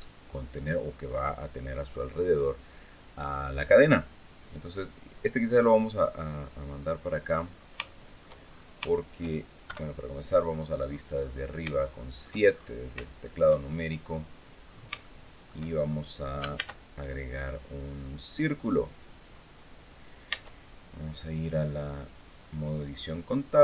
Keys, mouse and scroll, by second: 5.0 click, 6.5-6.8 scroll down 1, 6.9 middle click, 7.3 scroll down 1, 7.6 shift+middle click, 8.2-8.6 shift+scroll up 2, 8.7 shift+click, 9.4 KP_7, 10.2-10.6 scroll up 2, 10.6 scroll down 2, 11.5 shift+click, 12.5 scroll up 2, 12.7 shift+click, 13.4 shift+scroll up 1, 14.0 scroll down 1, 14.4-14.7 scroll up 1, 14.8 shift+click, 15.8-16.1 scroll down 2, 16.3 shift+a, 18.0 click, 20.0 Tab, 22.1 click.